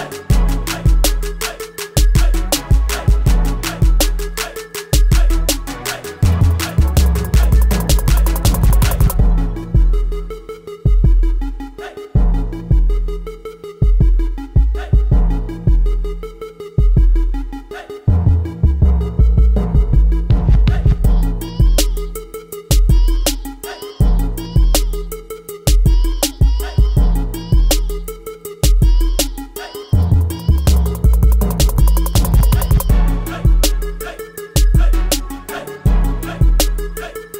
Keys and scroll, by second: 0.0 ctrl+t, 3.8 ctrl+z, 5.2 ctrl+a, 10.6-12.9 typing, 16.1-17.6 typing, 18.4 ctrl+a, 19.9 ctrl+t, 24.1 3, 24.6 Return, 25.3 ctrl+Return, 26.4 ctrl+t, 26.9 ctrl+t, 29.6 v, 31.4 ctrl+t, 33.8 space.